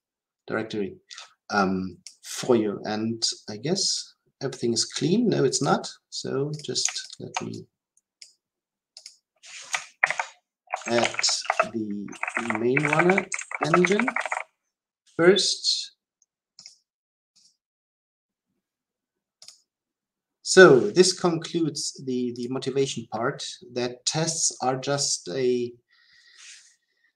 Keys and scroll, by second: 9.9 ctrl+k, 17.8 ctrl+alt+k.